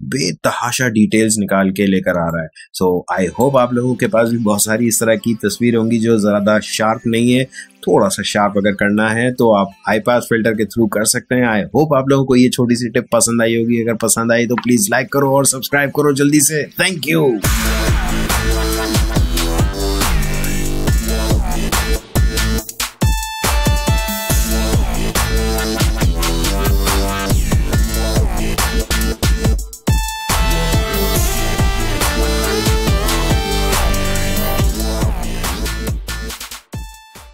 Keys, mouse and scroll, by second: 2.2 ctrl+click.